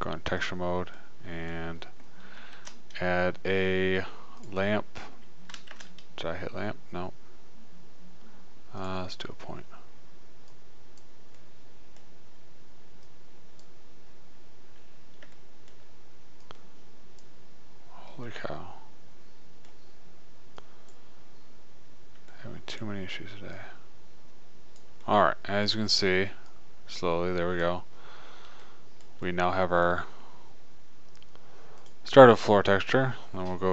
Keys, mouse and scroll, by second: 1.6 middle click, 3.0 shift+a, 6.2 shift+a, 10.8-12.2 right drag, 12.5 middle click, 15.1 middle click, 15.6-16.9 middle drag, 16.9-18.6 drag, 18.6-20.6 middle drag, 21.0-22.7 drag, 22.7-23.8 middle drag, 23.8-25.5 drag, 25.5 middle click, 26.7 right click, 28.3 middle click, 32.1-33.7 drag.